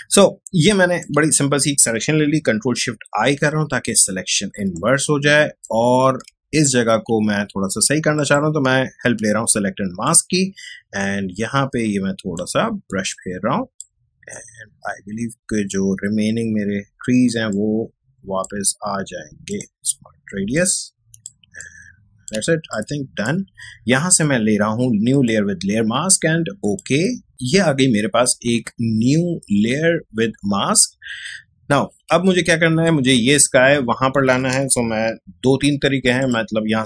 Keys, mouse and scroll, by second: 3.2 ctrl+shift+i, 4.4 space, 4.7-12.7 ctrl+drag, 12.7 space, 13.0 click, 13.4 space, 14.3-20.3 drag, 20.3 space, 20.5 click, 20.8 space, 21.6-26.4 ctrl+drag, 32.1 ctrl+Tab, 32.7 space, 32.8 click, 33.2 space, 36.2-36.8 drag.